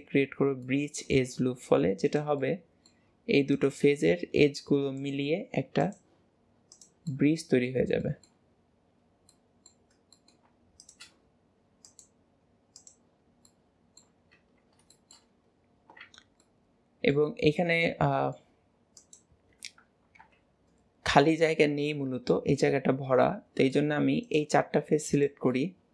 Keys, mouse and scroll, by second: 0.7 middle click, 1.5-2.1 scroll up 3, 2.1 click, 2.5-3.6 middle drag, 7.2 middle click, 8.1 shift+middle click, 8.5 scroll down 2, 8.6 scroll up 1, 8.7-9.1 scroll down 3, 9.3 middle click, 10.0 scroll up 2, 10.2 middle click, 10.8 shift+click, 11.9-13.3 drag, 13.3 scroll down 2, 13.5 middle click, 14.3 Tab, 15.0-16.1 shift+middle drag, 16.1 Tab, 16.5-19.0 middle drag, 19.0 click, 20.2 KP_Decimal, 21.5-24.3 middle drag, 24.3 shift+click, 25.2 shift+click, 25.6-25.9 middle drag.